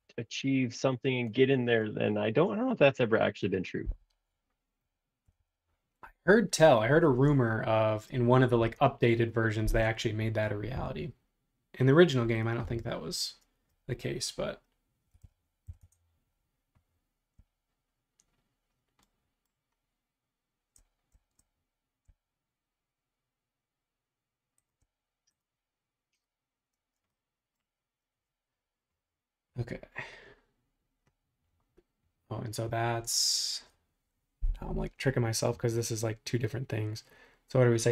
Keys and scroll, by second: 5.2 super+-, 5.4 super+-, 7.1 super+Tab, 10.8 l, 12.6 Up, 14.9-16.1 typing, 26.7 space.